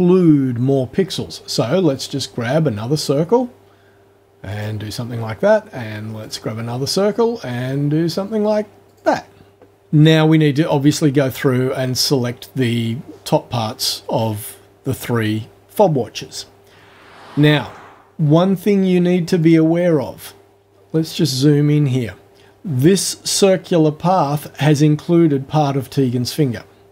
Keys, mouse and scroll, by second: 2.0 click, 4.5 click, 6.2 click, 8.9 click, 19.4 click, 20.8-21.4 scroll up 2.